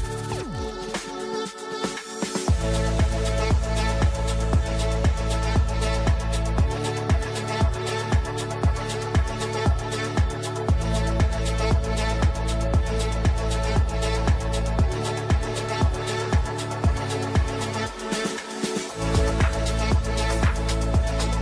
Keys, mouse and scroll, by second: 0.2 right click, 0.9 alt+click, 1.7 ctrl+g, 2.7-6.1 drag, 6.1 right click, 7.3-9.7 drag, 9.7 click, 10.5 ctrl+g, 10.9-14.0 drag, 14.0 ctrl+right click, 15.0 shift+click, 15.3 ctrl+g, 16.1 click, 16.8 shift+Page_Up, 17.7 F3, 18.1-20.0 ctrl+drag, 20.0-21.4 drag.